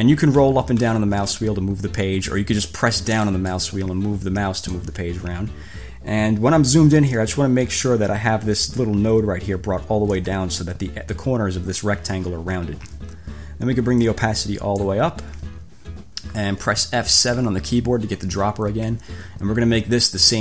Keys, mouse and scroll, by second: 0.2 scroll up 2, 0.4 scroll down 2, 0.6-1.0 scroll up 2, 1.0 scroll down 2, 1.2-1.5 scroll up 2, 1.5 scroll down 2, 1.7 scroll up 2, 2.0-2.4 scroll down 2, 2.9 click, 3.9-5.2 drag, 7.3-10.6 drag, 14.2 click, 17.6 F7.